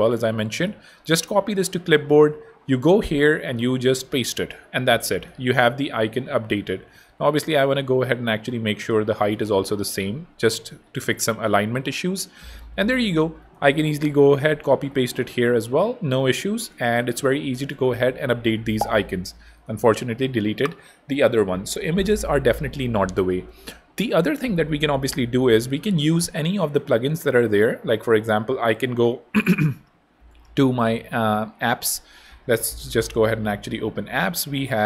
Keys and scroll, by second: 1.2 super+Tab, 3.6 super+a, 3.8 super+v, 8.9-9.7 typing, 13.8 super+c, 15.5 super+v, 17.0 BackSpace, 19.5 super+z, 20.2 BackSpace.